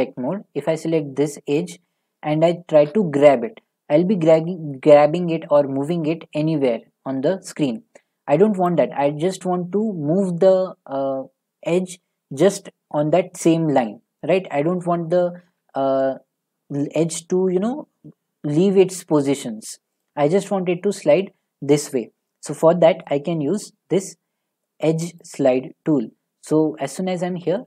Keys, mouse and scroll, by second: 2.9 g, 8.7 right click, 15.5 g, 20.0 right click, 23.4 right click, 24.3 middle click, 25.1 scroll, 25.2 click.